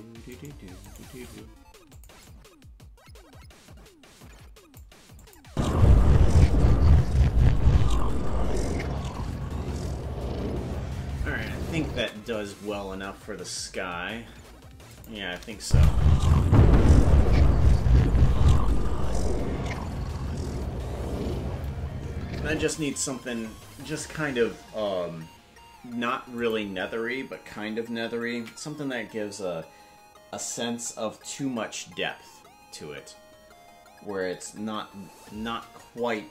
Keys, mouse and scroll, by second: 0.2 right click, 0.8 right click, 1.2 g, 2.2-4.8 drag, 5.2 click, 5.4 space, 11.9 space, 14.9 click, 15.6 space, 22.6 space, 26.4 click, 26.9 scroll down 1, 30.8 ctrl+s.